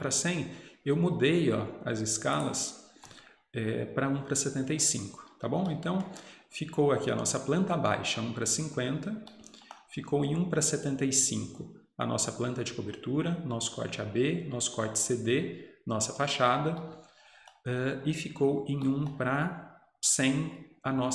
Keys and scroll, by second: 5.2 Escape.